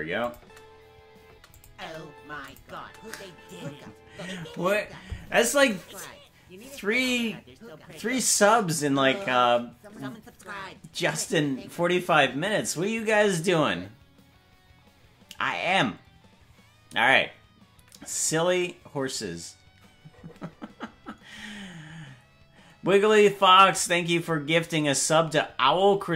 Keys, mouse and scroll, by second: 0.2 click, 0.4 space, 1.5 click, 1.5 space, 1.8 space, 2.4 space, 2.4 click, 2.7 space.